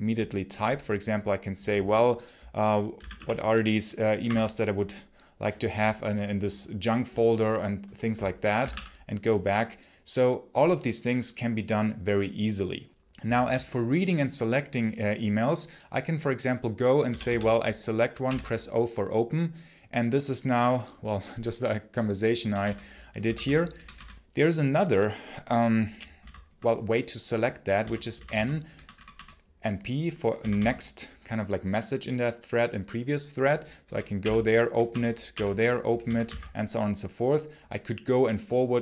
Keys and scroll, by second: 2.8 j, 4.1 Return, 8.2-9.0 typing, 13.0 j, 13.3 j, 16.9 k, 18.1 o, 22.2 p, 23.0 n, 23.6 p, 23.8 p, 26.0 n, 26.3 p, 27.6 n, 27.9 n, 28.6 p, 29.0 p, 30.2 n, 33.7-36.1 typing.